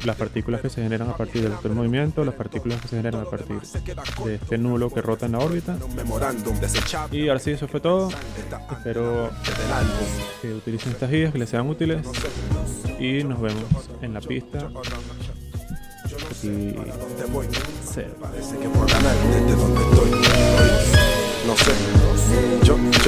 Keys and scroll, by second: 12.6 z, 13.6 alt+v, 14.4 v, 15.1 0.